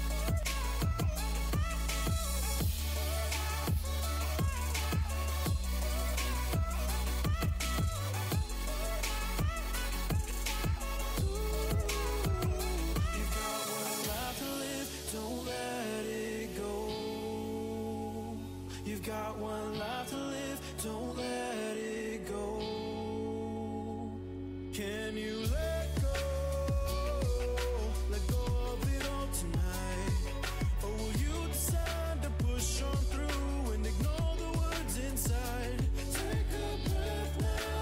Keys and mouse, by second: 0.4 Tab, 1.5 Tab, 2.5 ctrl+r, 5.6 ctrl+r, 6.5 a, 9.1 Tab, 10.8 Tab, 11.7 ctrl+z, 11.9-12.5 ctrl+z, 12.7 ctrl+z, 13.1 ctrl+z, 14.3 Tab, 14.7-18.0 drag, 18.0 ctrl+2, 18.7 Tab, 20.2 ctrl+r, 24.0 ctrl+r, 28.6 Tab, 30.1 Tab, 31.0 ctrl+r, 33.9 Tab, 34.4 Tab, 35.0 Tab, 37.4 Tab.